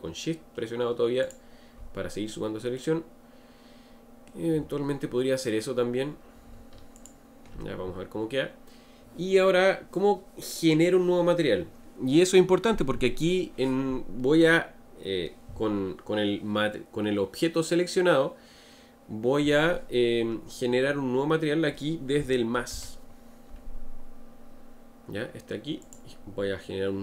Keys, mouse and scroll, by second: 1.3 shift+click, 2.8-5.8 middle drag, 7.0 alt+shift+click, 25.8-27.0 drag.